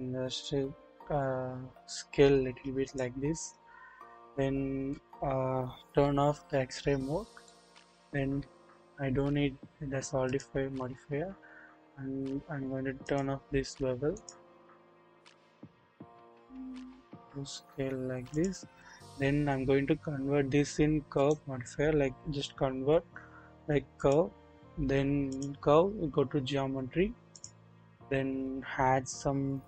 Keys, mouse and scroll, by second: 6.3 alt+z, 6.7-7.2 scroll up 1, 7.4-7.8 shift+middle drag, 7.8 shift+scroll up 1, 10.2 click, 13.0 click, 14.2 click, 14.7 scroll up 1, 15.7 s, 21.1-24.1 drag, 21.1 right click, 25.3 click, 25.7 scroll down 1, 27.3 drag.